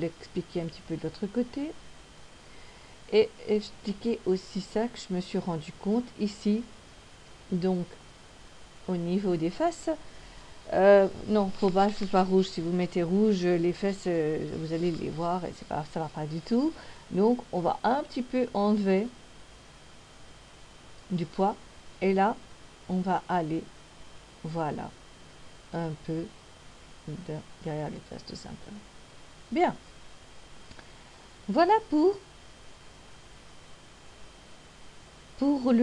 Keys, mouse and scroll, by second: 4.4 right click, 17.2 click, 22.8 click, 31.9 middle click.